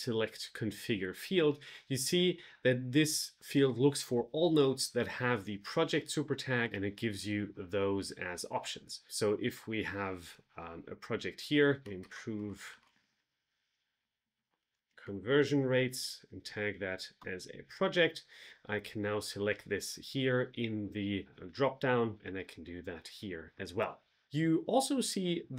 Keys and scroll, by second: 11.7 shift+i, 12.0 space, 13.2 BackSpace, 14.6 space, 15.8 shift+3, 17.1 Return.